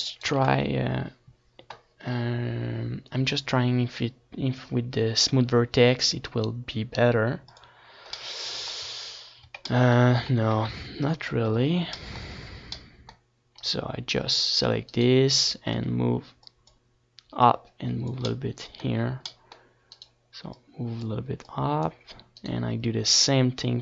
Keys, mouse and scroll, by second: 4.5 right click, 4.7 Tab, 5.5 Tab, 6.1 z, 6.6 a, 6.8 c, 7.4 c, 8.4-9.9 right drag, 9.1 KP_7, 9.2 KP_7, 10.3 z, 10.7 z, 10.7 c, 13.3 z, 14.1-16.0 drag, 19.4-20.9 drag, 20.4 Tab, 20.9 Tab, 21.5 ctrl+z, 21.9 ctrl+z, 22.8 Tab, 23.4 Tab.